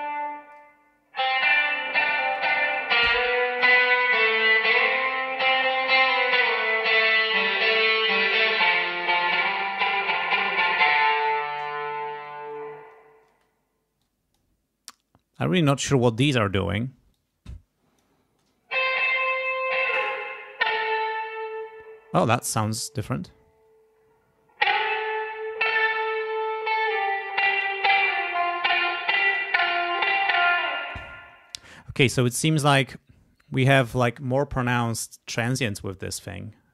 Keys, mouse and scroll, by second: 0.8-2.5 drag, 2.7 click, 5.6 click, 6.8 click, 9.8-10.8 drag, 13.3 space, 14.0 click, 17.1-18.2 drag, 18.3 space, 19.3 click, 19.9 click, 27.1 click, 29.1 click, 30.7 space.